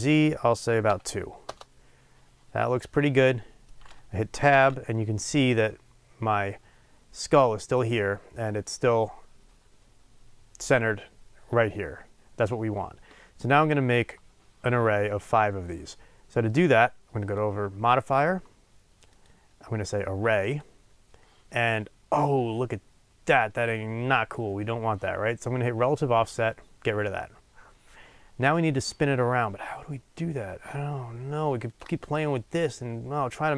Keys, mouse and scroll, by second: 1.5 Return, 2.8-4.5 middle drag, 4.5 Tab, 6.0-10.3 scroll down 2, 20.5-26.0 drag, 22.3 scroll up 2, 23.9-25.8 scroll down 1, 31.6 click, 32.8-33.5 drag.